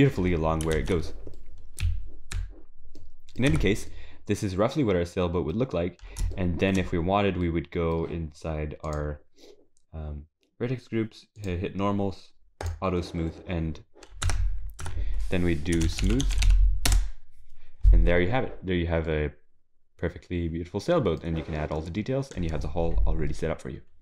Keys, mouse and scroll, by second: 0.8 ctrl+s, 1.3 middle click, 1.8 z, 2.7 scroll down 2, 3.0 middle click, 3.5 Tab, 3.9 middle click, 5.9 scroll up 4, 6.3 shift+middle click, 7.0 scroll down 1, 7.5 middle click, 8.9 click, 11.4 click, 12.6 click, 14.3 Tab, 14.8 Tab, 15.8 space, 16.2 o, 18.7-19.1 scroll down 3, 19.1 middle click, 21.2 scroll down 2, 22.0 middle click, 23.5 middle click.